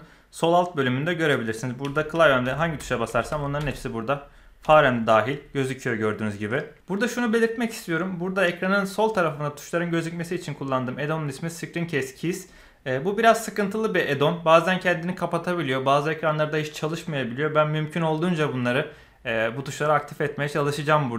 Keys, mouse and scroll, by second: 2.1-4.6 typing, 5.0 click, 5.3 right click, 6.5 middle click.